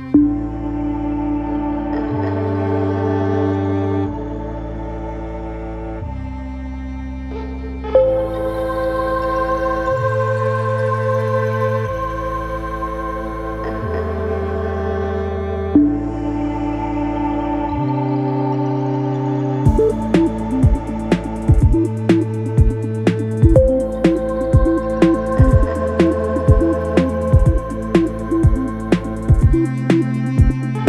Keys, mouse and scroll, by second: 13.0 ctrl+-, 24.2 double click.